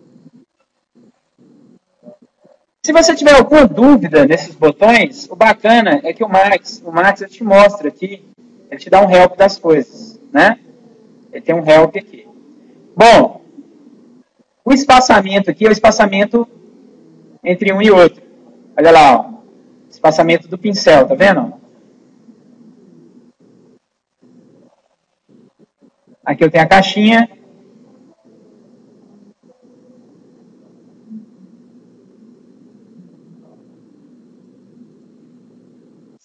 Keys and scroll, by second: 1.6 ctrl+z.